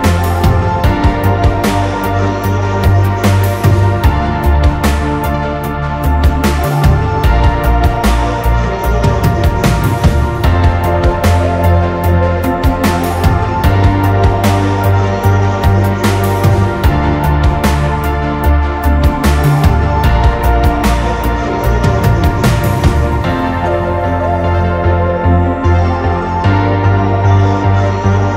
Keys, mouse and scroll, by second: 3.0 shift+click, 3.4-3.8 scroll up 1, 4.7 ctrl+click, 6.5 ctrl+t, 7.3 ctrl+t, 7.8 alt+shift+click, 12.1 Return, 13.2 Up, 16.7 e.